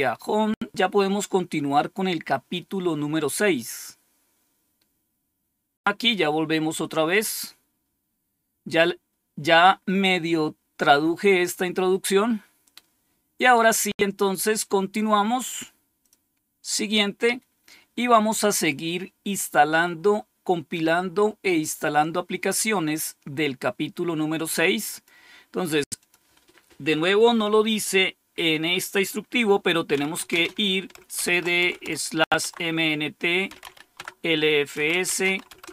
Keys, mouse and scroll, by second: 1.9-2.7 scroll down 2, 2.7-5.8 scroll down 3, 7.0 click, 15.9 click, 24.8 click, 25.9 click, 29.6-33.9 typing, 32.3 Tab, 34.6 Return, 35.0 typing, 35.4 Return.